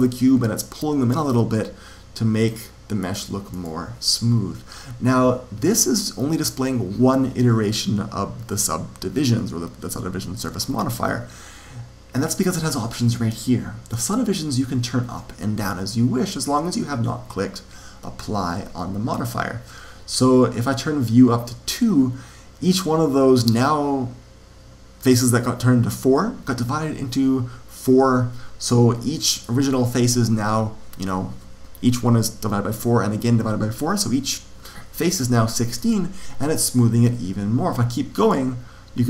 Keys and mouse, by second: 2.9 click, 21.6 click, 29.0-30.7 middle drag, 35.7-37.5 middle drag, 38.0-39.0 drag.